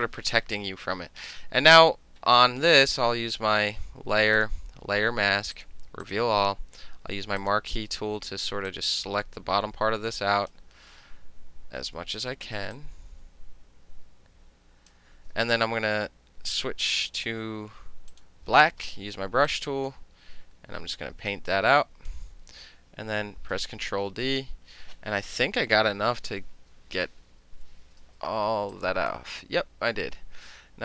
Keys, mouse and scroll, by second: 4.4 click, 5.6 click, 6.1 click, 7.4 click, 8.7-10.5 drag, 10.5-12.8 middle drag, 12.8-14.9 drag, 14.9-15.9 middle drag, 16.6 click, 18.2 click, 19.0 b, 19.5-22.1 drag, 23.6 ctrl+d, 25.8 ctrl+=, 28.2 space, 28.8 click, 30.1-30.8 middle drag.